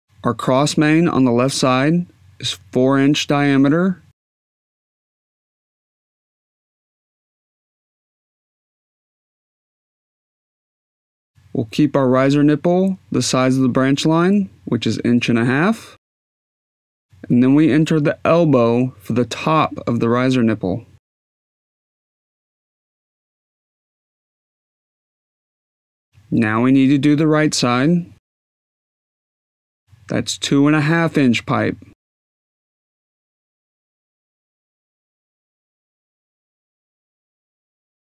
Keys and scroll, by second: 10.1 4, 12.4 Tab, 13.9-15.5 typing, 16.4 Tab, 22.2 e.